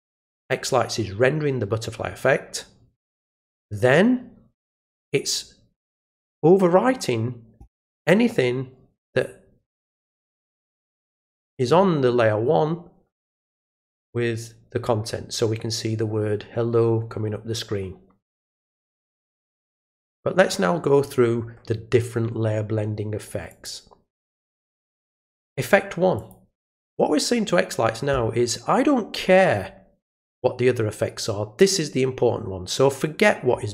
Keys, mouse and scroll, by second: 4.8 click, 23.5 click, 26.1 click, 31.6 click.